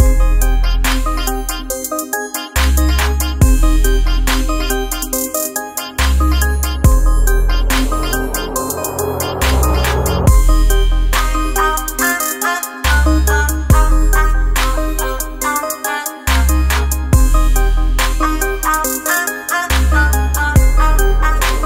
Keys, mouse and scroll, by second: 6.7 click, 9.7 space, 10.0 click, 10.2 space, 12.6 click, 13.7-19.0 drag, 19.0-21.6 drag.